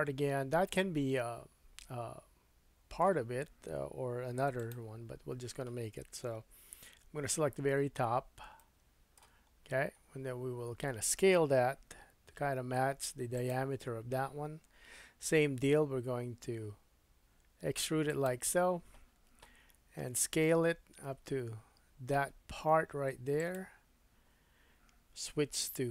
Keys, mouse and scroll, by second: 4.3 3, 4.7-8.2 drag, 7.3 KP_1, 8.0-8.4 scroll up 3, 8.6 shift+middle click, 9.5-10.3 scroll up 1, 11.9 s, 15.6 e, 18.1-25.9 drag, 19.6 s, 25.8 2.